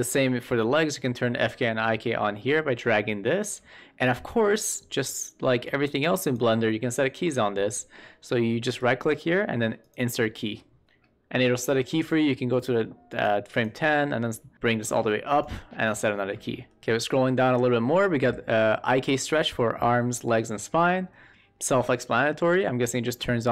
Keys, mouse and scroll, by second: 5.7 click, 8.6-10.1 right drag, 13.1 click, 13.5 click, 14.5 click.